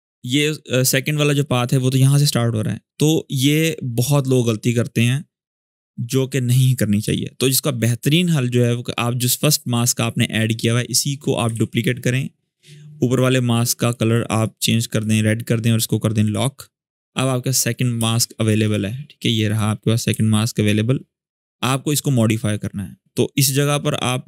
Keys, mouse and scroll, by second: 1.0-3.2 drag, 5.3 m, 6.4 click, 11.2 click, 11.3 ctrl+d, 12.8 click, 17.1-17.7 scroll up 1, 17.7 space, 17.9 click, 18.2 space, 19.2 click, 19.9 v, 20.1-23.1 drag.